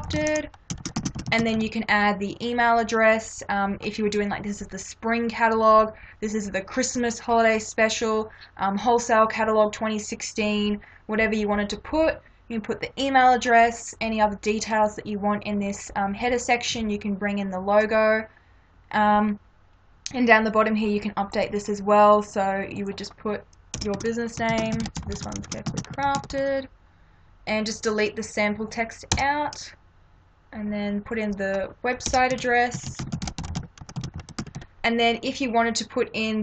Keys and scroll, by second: 0.0-1.6 typing, 23.8-26.3 typing, 29.2 BackSpace, 32.1-34.6 typing.